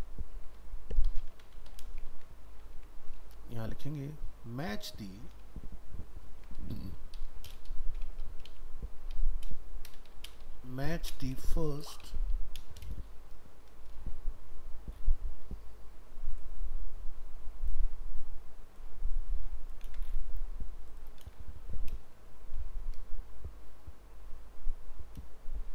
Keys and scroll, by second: 1.4 ctrl+c, 2.1 ctrl+v, 5.4 ctrl+shift+Left, 19.8 ctrl+c, 21.3 ctrl+v.